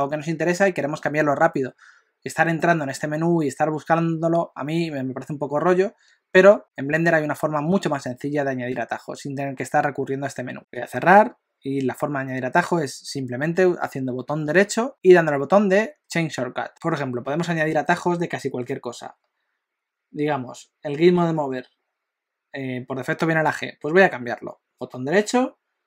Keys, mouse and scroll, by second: 24.8 right click.